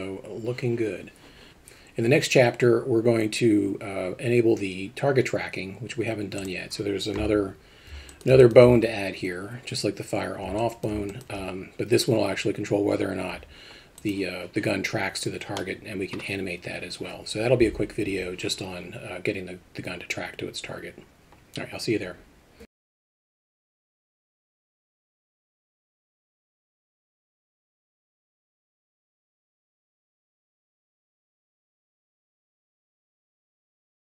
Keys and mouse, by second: 7.2 KP_0, 8.1 alt+middle drag, 8.4 alt+shift+middle drag, 10.6 alt+middle click, 11.1 alt+shift+middle drag, 13.3 g, 15.6-16.2 middle drag.